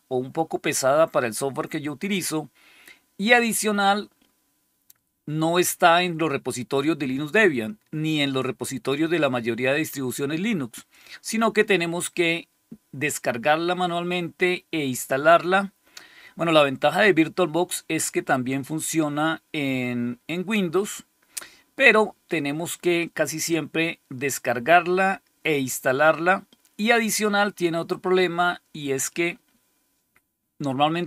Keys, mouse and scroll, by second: 10.6 click.